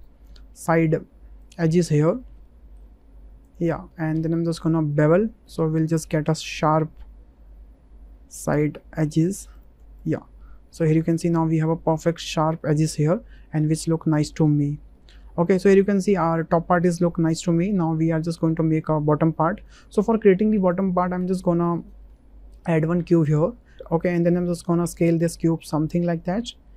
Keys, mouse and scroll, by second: 2.4 middle click, 3.4 alt+shift+click, 3.8-5.0 middle drag, 5.9 ctrl+b, 10.1 Tab, 10.6-11.6 middle drag, 12.6-14.3 middle drag, 14.9 shift+middle drag, 15.5 middle click, 18.1 shift+click, 19.7 middle click, 22.1 shift+a, 25.4-26.7 drag.